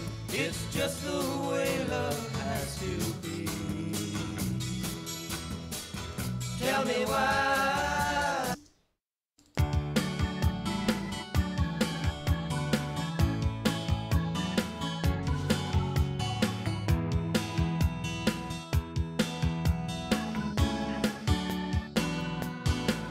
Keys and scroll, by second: 8.6 space, 11.7 ctrl+s, 20.3 ctrl+Left.